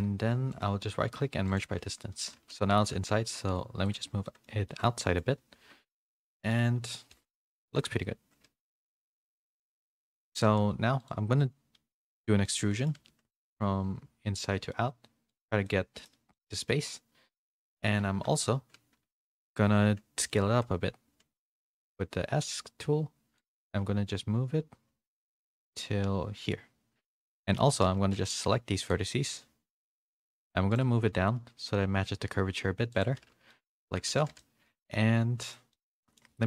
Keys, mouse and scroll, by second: 1.7 z, 2.4 g, 3.9 z, 4.3 middle click, 4.7 shift+middle click, 5.0 middle click, 5.9 KP_1, 6.7 KP_3, 7.1 z, 7.6 shift+middle click, 8.7 shift+middle click, 11.0 click, 11.0 3, 12.0 a, 12.6 middle click, 12.9 z, 13.3 e, 15.7 middle click, 16.4-17.4 middle drag, 18.2 KP_1, 19.0 KP_3, 19.6 z, 20.4 s, 27.6 1, 27.8 a, 28.1 a, 28.1 c, 31.0 g, 33.1 z, 33.5 middle click, 33.9 Tab, 34.1 a, 34.4 middle click, 34.4 a, 35.7 middle click.